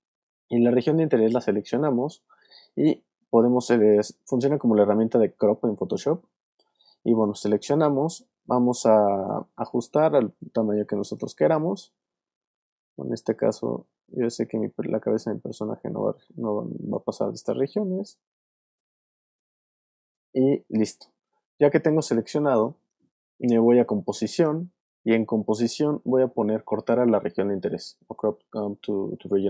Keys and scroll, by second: 8.7 alt+space, 9.5 space.